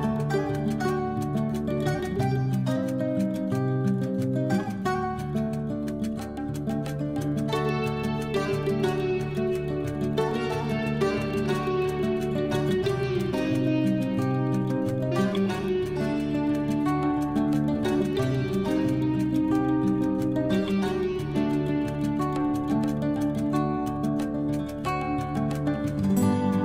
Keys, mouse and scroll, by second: 0.0 ctrl+i, 0.8 h, 1.7 click, 2.2 a, 3.1 scroll up 2, 4.1 shift+right click, 4.8 click, 6.3 ctrl+j, 7.0 scroll up 2, 7.8 scroll down 1, 9.4 click, 11.7 click, 13.9 click, 19.9 click, 22.8 0.